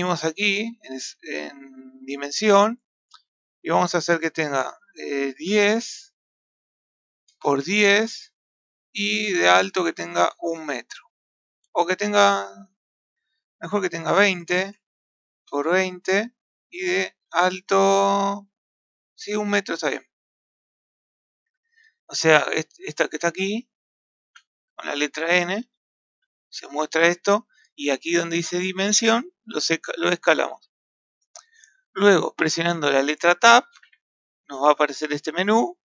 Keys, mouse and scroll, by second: 4.1-11.9 drag, 13.3 click, 13.6-19.3 drag, 20.2 scroll down 4, 20.7-23.0 middle drag, 23.0 n, 23.4 n, 24.3 n, 25.6 n, 26.1 n, 27.4-32.9 middle drag, 33.8 Tab.